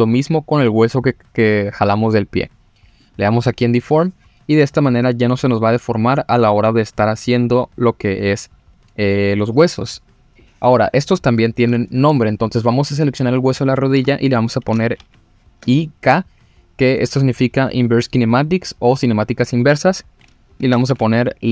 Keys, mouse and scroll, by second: 3.0 click, 12.9 click, 13.2-13.6 scroll up 2, 13.9 F2.